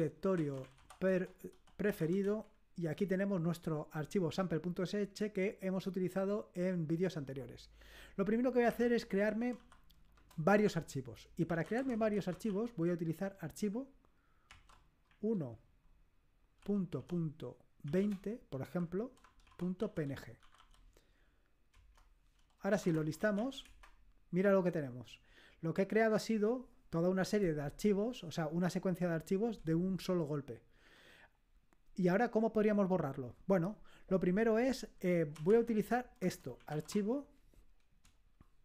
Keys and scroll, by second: 0.0-2.7 typing, 8.4-10.1 typing, 11.3-12.9 typing, 14.5-15.1 typing, 16.6-21.0 typing, 21.7 Return, 22.5-23.8 typing, 35.2-37.2 typing.